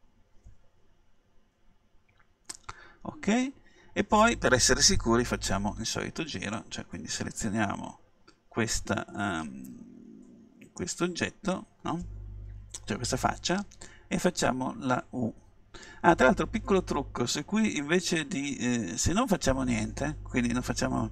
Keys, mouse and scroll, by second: 6.6-8.4 middle drag, 16.0 u.